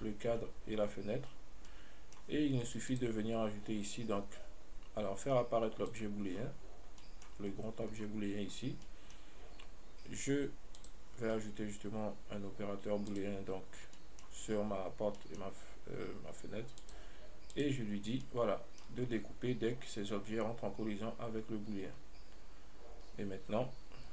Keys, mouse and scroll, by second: 1.9-3.1 middle drag, 3.1-6.3 drag, 6.7-7.1 scroll down 1, 7.3-8.0 middle drag, 8.0 scroll down 1, 9.1 middle click, 11.0-14.2 drag, 14.2-17.1 middle drag, 17.1 click, 18.3 scroll down 1, 18.5-19.3 middle drag, 19.3-19.7 scroll up 1.